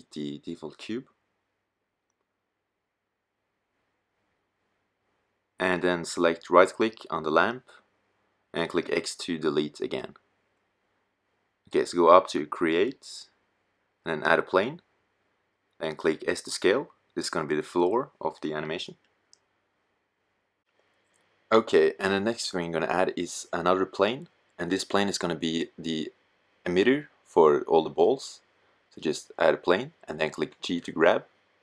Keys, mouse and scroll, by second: 1.4 x, 8.1 x, 15.7 s, 21.4-22.5 middle drag, 28.4-29.6 middle drag, 29.6 g.